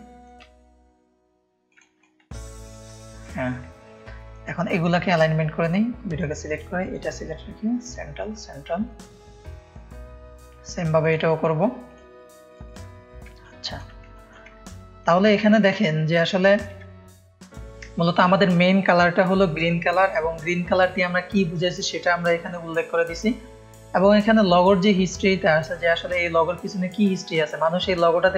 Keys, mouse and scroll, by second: 1.9 space, 2.0 click, 2.6 click, 2.9 click, 2.9 space, 4.2-6.1 drag, 6.8 click, 7.8-9.2 drag, 9.6-12.8 drag, 13.2 ctrl+space, 13.4 ctrl+click, 14.1 click, 14.1 space, 14.7 ctrl+click, 15.3 click, 15.3 space, 15.8 click, 16.3 ctrl+click, 16.4 ctrl+space, 16.8 click, 23.4 ctrl+space, 23.4 ctrl+click, 24.0 click, 24.0 space, 26.6 ctrl+click, 26.7 ctrl+space.